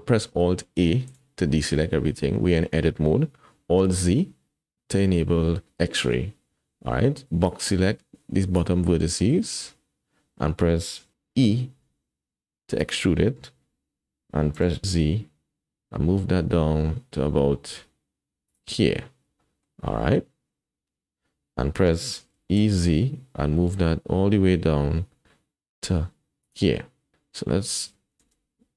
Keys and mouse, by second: 1.1 alt+a, 3.9 alt+z, 7.7 click, 11.8 e, 14.5 g, 19.5 shift+click, 22.4 e, 28.3 alt+z.